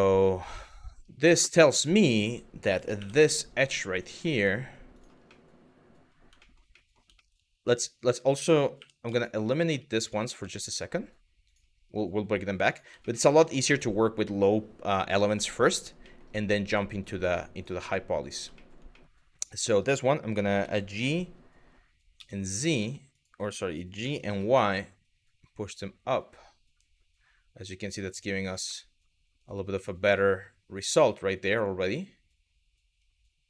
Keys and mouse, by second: 0.0 middle click, 1.3 Tab, 1.9 Tab, 2.6 2, 4.6 shift+click, 5.0 middle click, 6.1 shift+middle click, 6.5 middle click, 6.8 shift+middle click, 8.4 2, 8.8 click, 9.9 x, 12.7 middle click, 14.5 shift+click, 15.1 middle click, 15.8 middle click, 16.2 shift+click, 16.6 shift+click, 17.2 shift+click, 17.7 middle click, 18.2 shift+middle click, 18.6 middle click, 20.2 g, 21.8 z, 23.6 g, 28.0 click, 28.4 middle click, 29.5-33.4 middle drag.